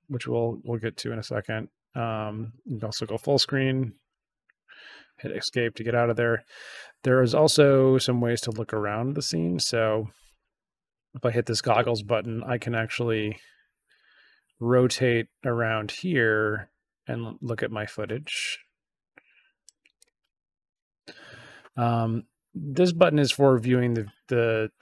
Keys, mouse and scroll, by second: 1.4 click, 4.0 Escape, 8.4 click, 10.2 click, 12.3-19.6 drag, 19.9 click, 20.7 click.